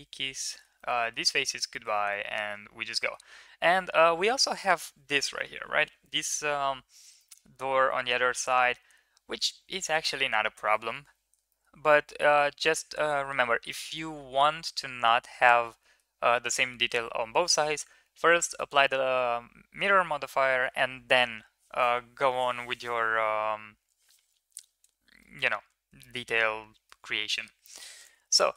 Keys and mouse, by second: 0.3 shift+middle drag, 0.6-1.0 middle drag, 1.5 shift+middle drag, 1.9-2.3 middle drag, 2.7 middle drag, 7.0-7.9 middle drag, 8.2-9.7 drag, 11.3 shift+middle click, 12.0 shift+middle drag, 13.7-14.6 middle drag, 15.5 middle drag, 25.0 shift+middle drag, 25.8 shift+middle drag, 26.7 shift+middle drag, 27.3 Tab, 28.2 middle click, 28.5 middle click.